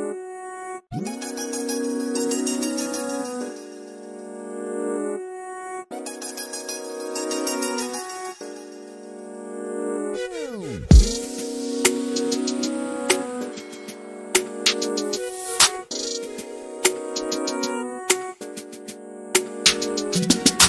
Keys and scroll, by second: 4.0-4.7 typing.